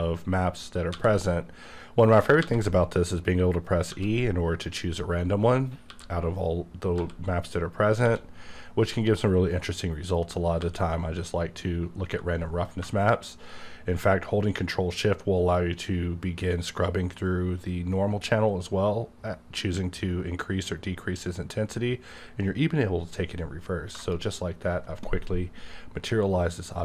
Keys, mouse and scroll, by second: 0.9 e, 2.4 e, 3.9 e, 5.9 e, 6.9 e, 8.0 e, 10.6 e, 23.9 shift+click.